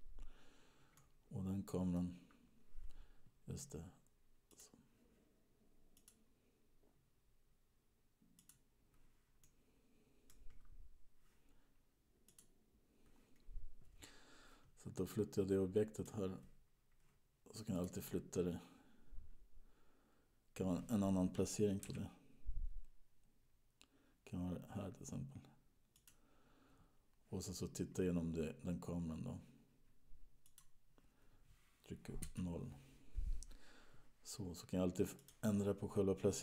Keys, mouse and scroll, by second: 1.4 middle click, 4.8 click, 6.3 click, 9.8 middle click, 10.8-12.6 scroll down 4, 12.6 click, 13.7-14.2 scroll down 1, 16.2 click, 18.2 click, 18.9-20.1 scroll down 7, 20.1-21.1 scroll down 3, 22.6 g, 30.6 click, 32.5 KP_0, 34.5-35.6 scroll up 1, 35.6 click.